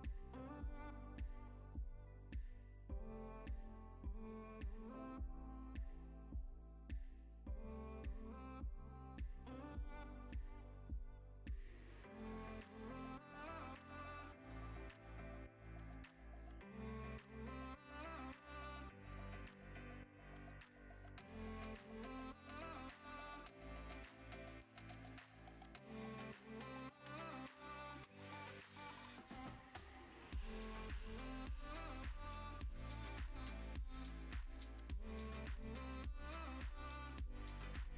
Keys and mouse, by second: 0.5 r, 0.6 r, 2.2 click, 3.3 middle click, 4.0 click, 4.3 click, 4.7 click, 6.3 click, 8.2 click, 8.9 click, 9.4 click, 9.6 click, 10.6 click, 11.5 click, 12.5 click, 13.0 click, 15.0 click, 15.3 click, 17.3 click, 18.2 click, 18.5 click, 19.5 click, 20.3 click, 20.7 click, 21.7 click, 23.7 click, 24.0 click, 24.4 click, 24.7 click, 25.2 click, 25.6-26.9 drag, 27.8 click, 28.1 middle click, 28.4 click, 28.7 click, 29.5 click, 30.0 Tab, 30.1 3, 31.0 click, 31.3-35.1 typing, 31.8 Escape, 32.7 click, 33.1 click, 33.8 click, 34.0 click, 34.3 Escape, 34.5 click, 35.0 click, 35.6 click, 36.0 Tab, 36.4 ctrl+s, 37.2 click, 37.4 middle click.